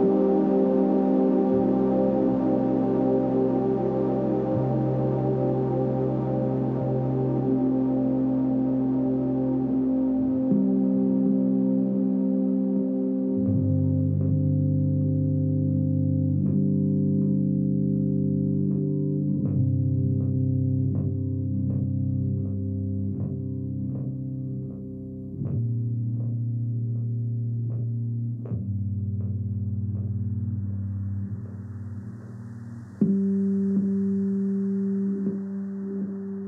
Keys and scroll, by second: 20.3 super+i, 22.0 b, 23.8 0, 24.4 [, 26.8 x, 29.5 space, 30.6 2, 31.3 ], 31.9 [, 33.6 [, 35.4 space.